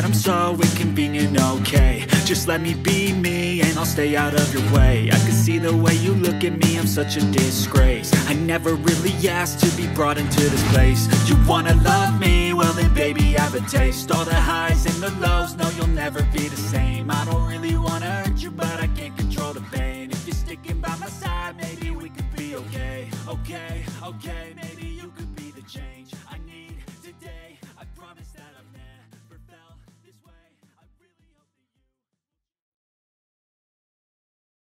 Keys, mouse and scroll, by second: 0.0-2.4 typing, 5.2 alt+space, 5.3 alt+click, 5.8 ctrl+click, 6.3 alt+click, 6.9 ctrl+space, 7.0 ctrl+click, 18.1 alt+click, 19.7 double click, 20.3-23.3 typing, 24.8-26.1 typing, 27.9-28.8 typing, 30.6 alt+space, 30.7 alt+click, 31.0 alt+double click, 31.1 alt+space, 31.5 ctrl+click.